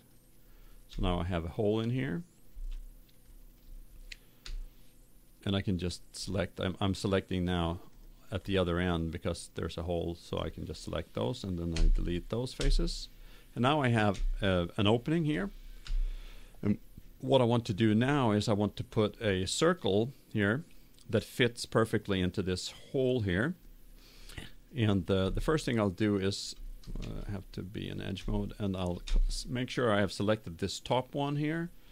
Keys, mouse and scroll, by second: 0.9-2.8 middle drag, 4.4 KP_7, 7.3-11.6 right drag, 11.7 Delete, 14.2-16.0 middle drag, 15.7 KP_7, 25.9-27.8 right drag, 26.9 ctrl+Tab, 28.4-30.1 middle drag.